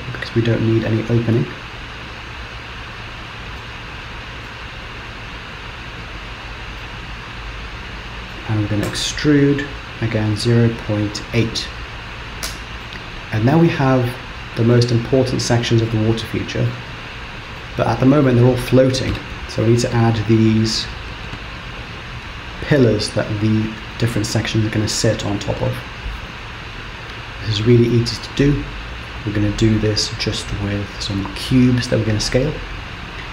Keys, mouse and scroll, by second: 0.8 shift+click, 2.4 shift+click, 3.0 shift+click, 3.6 middle click, 6.1 shift+click, 6.9 middle click, 9.0 e, 12.5 Tab, 12.9 middle click, 15.9 middle click, 17.5 scroll down 1, 17.7 middle click, 27.2 scroll down 2, 28.2 middle click.